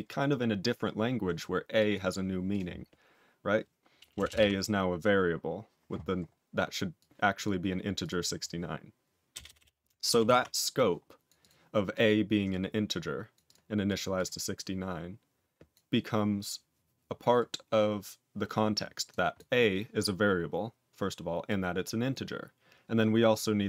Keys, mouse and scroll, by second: 1.7 click, 1.9 click, 2.4 click, 4.1 Return, 4.2 Return, 4.4 a, 6.9 click, 7.9 click, 7.9 click, 9.3 BackSpace, 9.4 BackSpace, 9.5 BackSpace, 10.6 ctrl+s, 11.2 click, 11.3 click, 11.9 click, 12.0 click, 12.5 click, 13.3 click, 13.4 click, 13.8 click, 13.9 click, 14.1 click, 14.5 click, 15.7 click, 19.0 click, 19.3 click, 21.4 click, 22.0 click, 23.2 click.